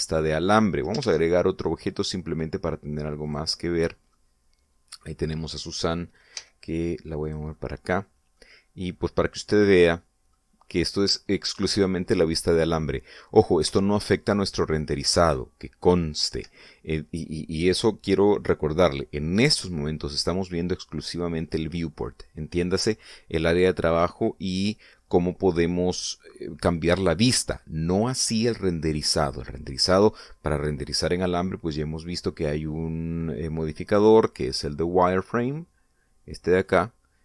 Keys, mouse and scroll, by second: 0.6 middle click, 1.9 shift+a, 4.1 click, 4.9-6.3 middle drag, 7.2 g, 8.1 click, 8.3-8.9 middle drag, 8.9 scroll down 1, 9.2-10.1 middle drag, 10.2-11.3 middle drag, 11.5 scroll up 1, 14.5 F12, 17.1 Escape, 34.6 click, 35.5 click.